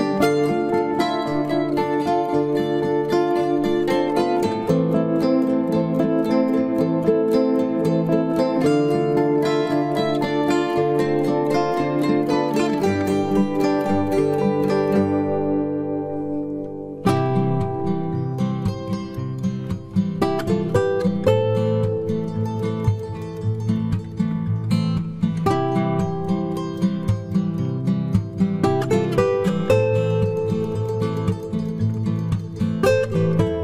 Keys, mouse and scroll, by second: 5.7-7.6 right drag, 7.1 b, 7.7 g, 8.7-10.6 right drag, 9.0 b, 9.5 g, 10.7-12.6 right drag, 11.0 g, 11.7 b, 12.2 g, 13.0 g, 15.8-20.2 right drag, 16.0 b, 16.8 b, 17.1 g, 18.5 b, 18.9 g, 20.5 right click, 20.7 b, 21.0 g, 23.3-24.8 drag, 23.4 b, 23.8 g, 25.1-26.9 right drag, 25.3 b, 25.8 g, 27.5 g, 28.2-30.6 right drag, 28.4 b, 29.4 g, 31.5 g.